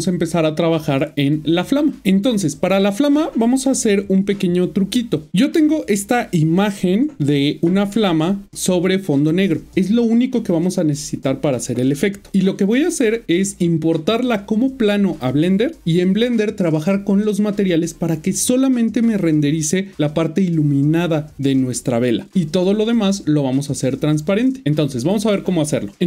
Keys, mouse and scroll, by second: 2.0 click.